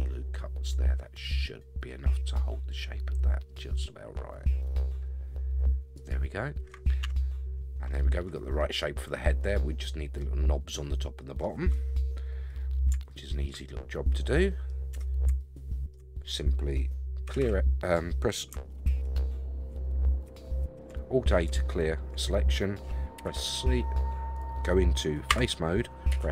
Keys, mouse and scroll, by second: 7.0 Tab, 8.6-10.2 middle drag, 10.6-11.4 middle drag, 12.6 scroll down 4, 13.1-13.5 shift+middle drag, 13.7-14.7 middle drag, 14.9 Tab, 15.4 shift+middle click, 16.0-16.8 scroll up 5, 17.2 a, 17.4 a, 18.9 alt+a, 20.2 a, 21.6 shift+middle click, 23.2 c, 25.3 3, 26.1 c.